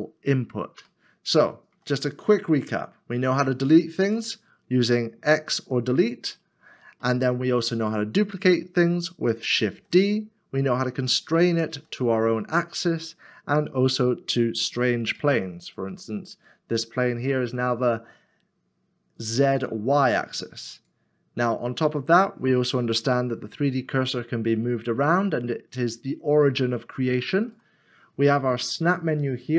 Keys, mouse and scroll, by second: 0.9 shift+middle click, 2.1 scroll up 1, 3.2-4.6 scroll down 1, 4.6 scroll down 1, 5.2 x, 7.1 middle click, 9.7 shift+d, 11.7 y, 15.2 shift+x, 24.0 shift+right click.